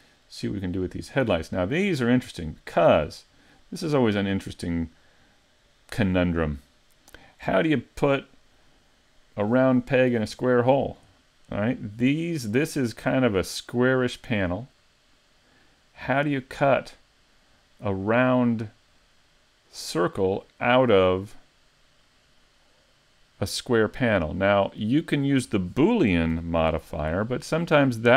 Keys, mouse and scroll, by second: 0.6 middle click, 2.1-2.5 scroll up 3, 2.6 middle click, 3.3-4.0 scroll up 2, 4.0 middle click, 4.6 middle click, 5.6 scroll up 1, 6.5 middle click, 7.5 shift+middle click, 26.3 n.